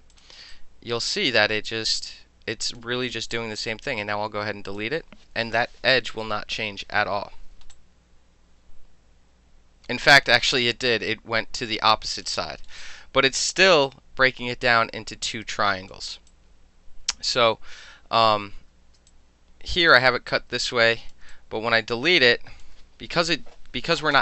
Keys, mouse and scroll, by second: 0.1 click, 0.2 alt+middle click, 0.5-2.8 alt+drag, 2.8-3.3 alt+middle drag, 3.3-3.8 right drag, 3.8 middle click, 6.6 Delete, 7.7-12.2 alt+drag, 12.2 alt+middle click, 12.8-15.9 alt+drag, 15.9 alt+middle click, 16.3-18.3 alt+drag, 18.5 ctrl+z, 20.6 alt+click, 21.3-22.6 alt+drag.